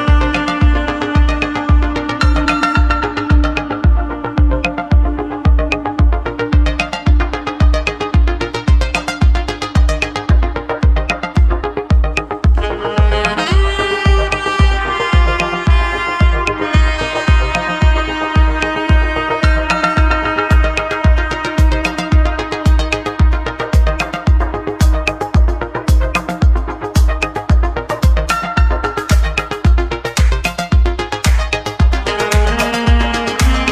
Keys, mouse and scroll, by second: 0.6-2.7 middle drag, 2.7-5.0 drag, 5.0 alt+h, 7.2-8.6 drag, 8.6 g, 13.2-14.5 middle drag, 14.5-14.8 scroll down 1, 14.8-17.4 middle drag, 20.5-22.4 drag, 22.4-24.9 middle drag, 29.8 shift+a, 31.4-33.7 drag.